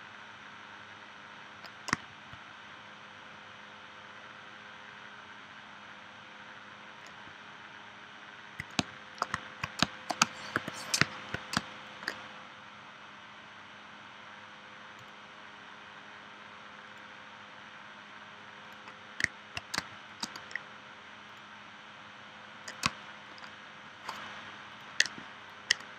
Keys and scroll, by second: 8.8 space, 9.8 space, 10.6 p, 11.5 space, 19.7 space, 22.8 space.